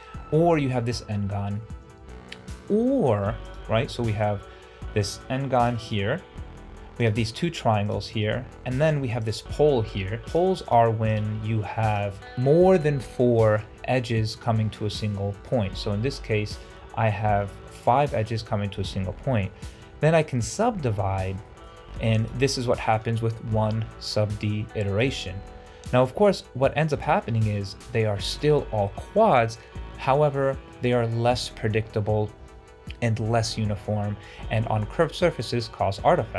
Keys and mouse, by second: 1.4 shift+middle drag, 3.7 Tab, 5.6 3, 5.8 click, 8.9 1, 10.2 2, 10.5 shift+click, 17.7 middle click, 18.1 Tab, 19.2-19.6 shift+middle drag, 20.1 shift+middle drag, 21.3 shift+middle drag.